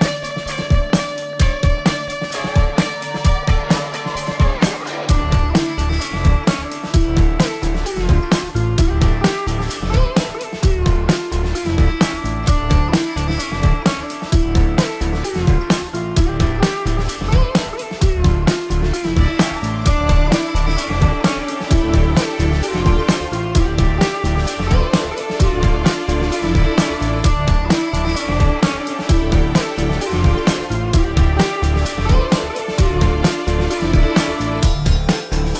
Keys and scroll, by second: 0.7 ctrl+=, 1.3 space, 2.3 ctrl+=, 3.7 ctrl+alt+z, 6.8 space, 8.2 ctrl+alt+z, 10.0 ctrl+-, 11.2 ctrl+-, 11.8 ctrl+-, 12.0 space, 12.7 ], 13.4 ctrl+alt+z, 13.5 ], 13.8 ctrl+alt+z, 14.3 ctrl+-, 15.2 ], 15.9 ctrl+=, 18.1 space, 20.1 ctrl+=, 20.5 ctrl+=, 21.6 ctrl+=, 22.3 ctrl+=, 23.3 ctrl+=, 23.5 space, 23.8 ctrl+alt+z, 26.0 ctrl+=, 28.4 ctrl+=, 28.9 space, 30.8 ctrl+alt+z, 31.7 ctrl+-, 32.0 space, 33.9 space, 34.5 space, 35.2 ctrl+-.